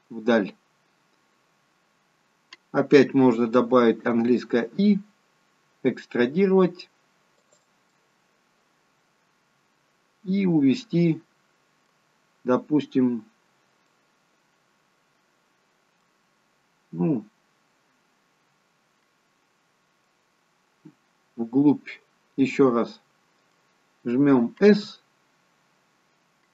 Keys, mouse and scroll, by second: 0.6-1.4 scroll up 2, 8.1 middle click, 14.0 middle click, 20.3 middle click.